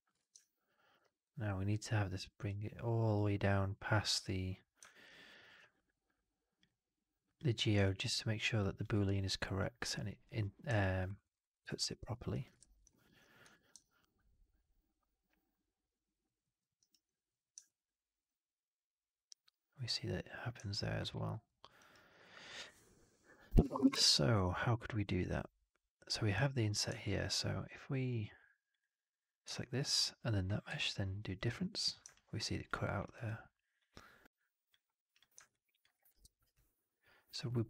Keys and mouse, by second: 0.0 shift+x, 0.3 alt+click, 1.1 click, 2.3 click, 4.8 alt+middle click, 4.9 alt+right click, 6.5 click, 7.1 click, 7.8 alt+middle click, 8.7 alt+click, 10.7 alt+middle click, 11.0 alt+right click, 11.2 alt+middle click, 11.4 alt+click, 11.7 alt+middle click, 12.2 alt+click, 12.5 shift+x, 12.8 alt+middle click, 13.3 4, 13.7-16.1 alt+drag, 16.3 alt+middle drag, 16.7 alt+right drag, 21.0 alt+middle drag, 21.3 alt+middle drag, 21.7 alt+right click, 26.9 alt+click, 28.6 click, 30.5 q, 32.0-32.5 alt+drag, 32.7 alt+middle drag, 32.9 alt+right drag, 33.1-34.6 alt+drag, 33.5 alt+q, 35.0 drag, 35.2 alt+right drag, 35.4 alt+drag, 35.8 alt+middle click, 36.0 alt+right drag, 36.2 alt+right drag, 36.4-37.6 alt+drag.